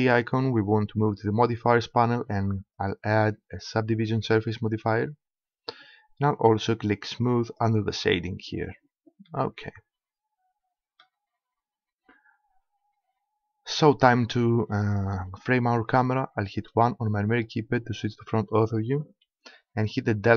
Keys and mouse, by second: 0.0-1.8 drag, 2.8-4.6 drag, 5.0-7.4 middle drag, 7.4-9.2 drag, 11.1-12.5 middle drag, 14.8-16.7 middle drag, 16.7 KP_1, 19.4 KP_Decimal.